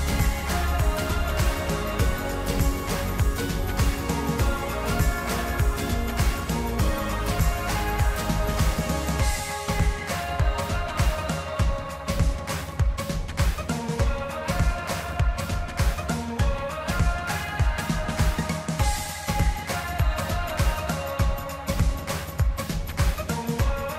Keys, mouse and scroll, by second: 1.0-3.0 drag, 3.8 click, 8.9-10.7 shift+middle drag, 10.7 e, 12.6-14.7 drag, 15.3 click, 22.6-23.9 middle drag.